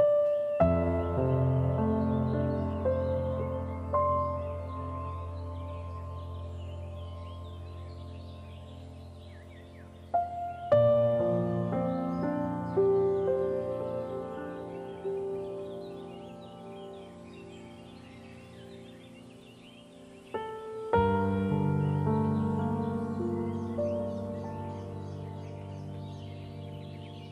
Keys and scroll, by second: 2.9 ctrl+0.